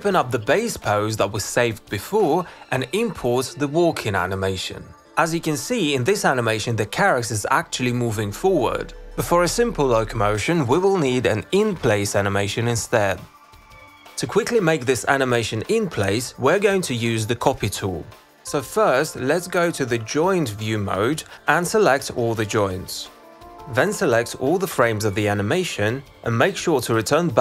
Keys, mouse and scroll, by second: 1.6 click, 3.3-4.7 drag, 6.7-9.6 drag, 11.8 click.